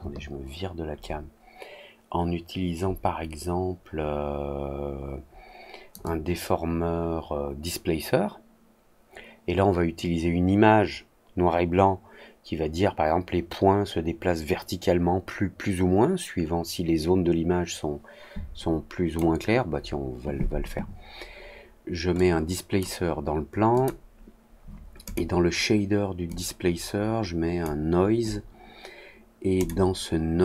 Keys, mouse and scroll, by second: 0.0-5.8 drag, 6.0-19.1 drag, 22.1 click, 23.7 click, 25.0 click, 26.2-27.5 drag, 29.5 click.